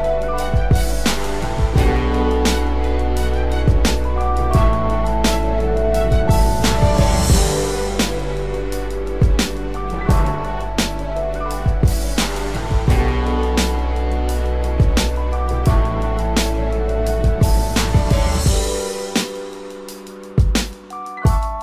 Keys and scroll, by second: 13.5 ctrl+-, 17.1 ctrl+=, 19.7 ctrl+-.